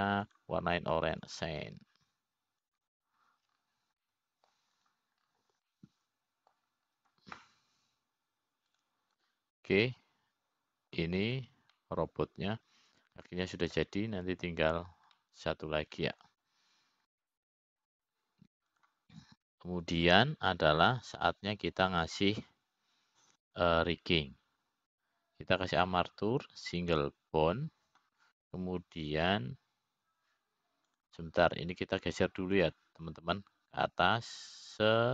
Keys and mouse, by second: 0.4 middle click, 2.9-5.5 drag, 6.6 middle click, 7.4 click, 8.3 middle click, 11.3 click, 12.4-13.6 middle drag, 13.9 click, 14.5-16.4 middle drag, 17.8-18.9 middle drag, 19.8 middle click, 21.7 `, 22.7 `, 26.0-29.5 drag.